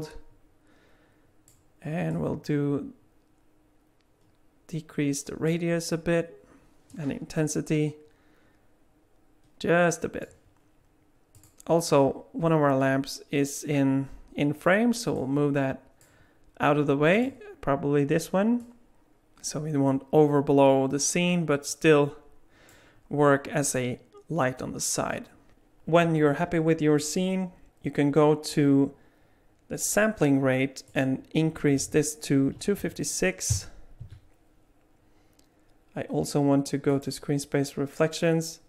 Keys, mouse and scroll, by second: 2.1 click, 6.9 click, 11.3 click, 15.1 click, 17.1 click, 18.6 click, 30.9 click, 36.9 click.